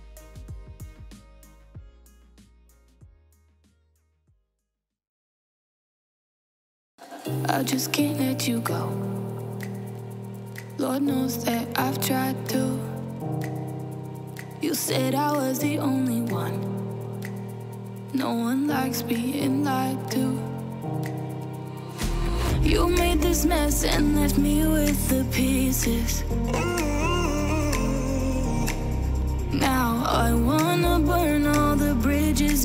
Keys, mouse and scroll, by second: 0.3 Return, 6.3 Escape, 15.1 alt+Return, 16.1 ctrl+Return.